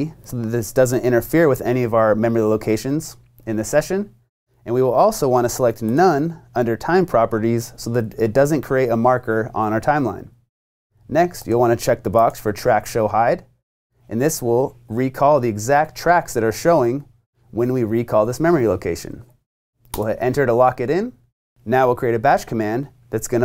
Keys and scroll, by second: 0.0-0.1 typing, 19.9 Return.